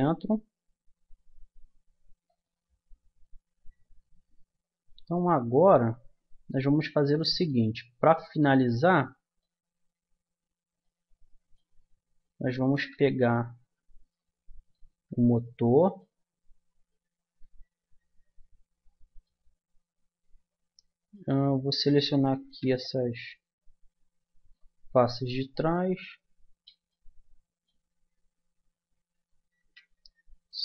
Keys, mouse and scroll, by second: 3.2-5.1 middle drag, 5.5-10.7 middle drag, 12.3 Tab, 12.8 Tab, 13.6 Tab, 14.9 Tab, 17.4 a, 22.4 c, 26.6 right click, 26.9-28.1 middle drag, 28.1 right click, 29.6 c.